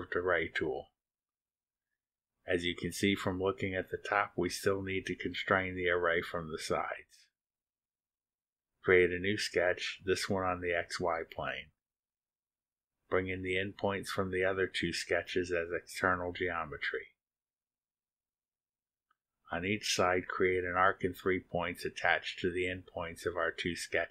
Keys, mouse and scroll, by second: 0.2 click, 2.3 click, 5.0-6.0 middle drag, 7.9 click, 10.0 click, 11.5 click, 12.4-12.8 scroll down 2, 14.6 click, 15.6 click, 17.3 click, 18.7 click, 20.0 click, 21.0 click, 23.1 click.